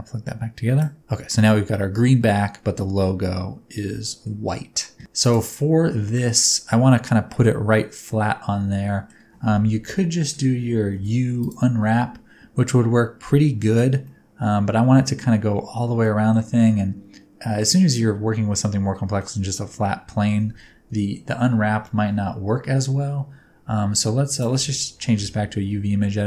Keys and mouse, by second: 3.9 middle click, 5.2 click, 6.1 shift+middle click, 6.9 middle click, 7.9-9.0 middle drag, 10.0 ctrl+KP_Add, 10.9 u, 14.1-15.2 middle drag, 16.1 middle click, 16.6-17.6 middle drag, 19.2 middle click, 21.0 ctrl+KP_Add, 24.4-25.6 drag.